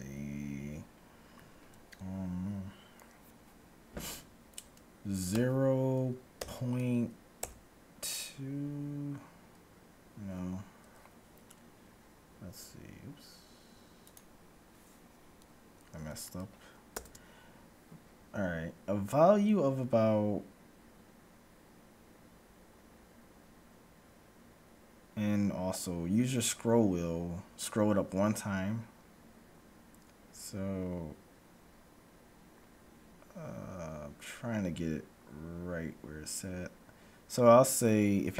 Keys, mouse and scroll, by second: 17.0 ctrl+b.